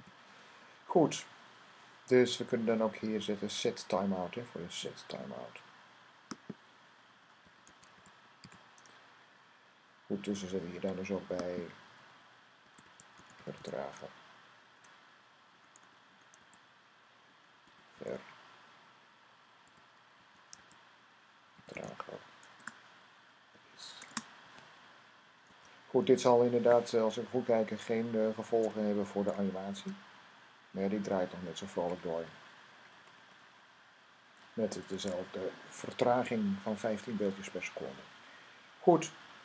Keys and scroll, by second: 0.0-0.3 typing, 7.0-8.6 typing, 12.2-13.9 typing, 15.4-17.8 typing, 19.5-22.2 typing, 23.4 typing, 25.3 super+s, 28.4-30.1 typing.